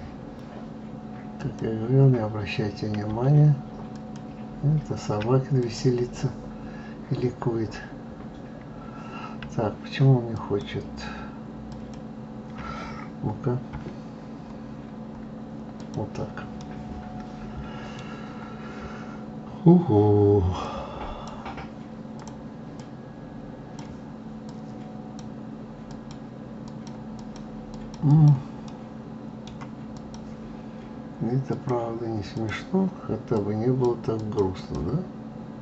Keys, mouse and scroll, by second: 1.3 click, 3.9-4.9 shift+drag, 5.6 click, 10.3 shift+click, 13.7 KP_Divide, 14.6-15.5 scroll down 6, 15.7 click, 16.6-18.0 middle drag, 18.0 scroll down 2, 20.6 click, 22.1 click, 22.7-24.5 drag, 25.8 click, 26.6 click, 27.1 click, 27.7 click, 28.0 click, 28.6-29.9 middle drag, 29.9 click, 31.5-33.8 drag, 34.2 click.